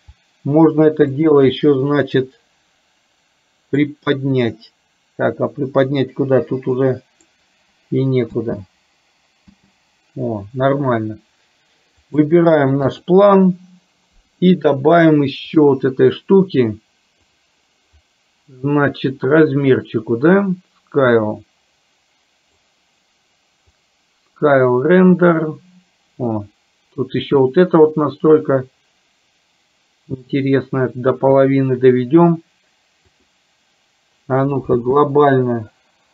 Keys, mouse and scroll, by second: 1.2 shift+click, 4.0-7.5 drag, 8.4 space, 9.7 space, 12.2 click, 13.0 click, 15.6 click, 17.2 click, 20.6-22.7 drag, 23.9-31.5 drag, 33.2 click, 35.0 space.